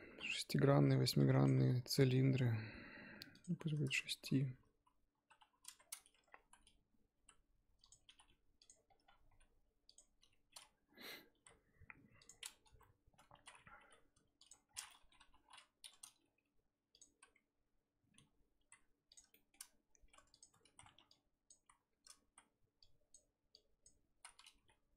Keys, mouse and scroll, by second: 2.1 scroll down 1, 3.3 click, 4.0-5.2 scroll down 3, 5.3 KP_3, 5.8-6.1 scroll up 4, 6.1 Tab, 6.3 scroll down 1, 6.4 z, 7.2 s, 8.7-9.3 scroll up 10, 9.3 s, 10.0-11.3 scroll up 4, 11.3 r, 12.6 KP_1, 13.3 z, 13.8 g, 14.7 scroll down 3, 14.9 middle click, 15.2 KP_3, 15.6-16.2 scroll up 2, 16.2 g, 18.2-18.6 scroll up 1, 18.6 r, 19.3 shift+middle click, 19.6-20.1 scroll up 2, 20.1 Tab, 20.3 click, 20.5 Tab, 20.7 z, 20.9 1, 21.1 click, 21.5 z, 22.2 z, 22.8 click, 24.1 z, 24.6 g.